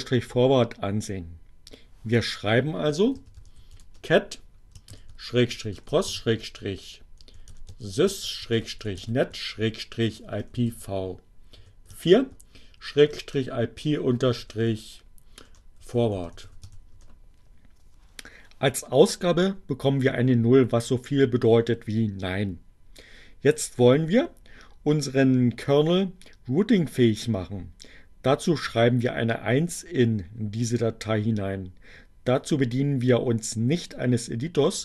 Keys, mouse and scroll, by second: 1.0 c, 3.2-17.0 typing.